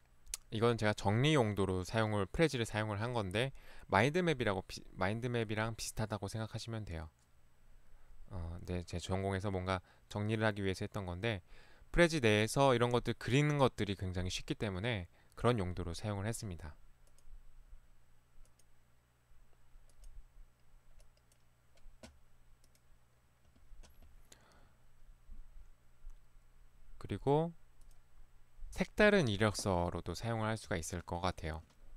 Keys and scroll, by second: 30.7 Right.